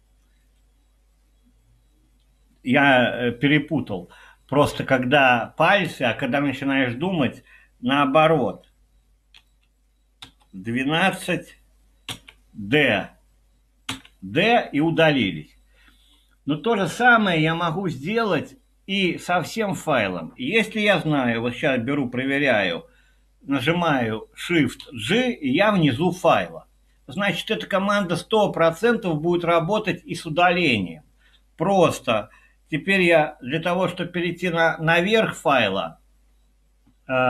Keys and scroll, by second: 9.4-10.2 typing, 12.1 typing, 13.9 typing, 24.9 shift+g.